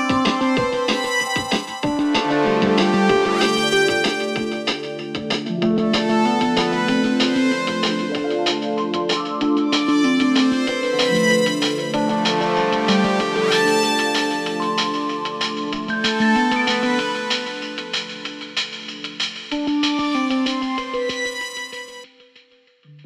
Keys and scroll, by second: 0.3 ctrl+z, 6.5 ctrl+z, 9.0 ], 12.9 4.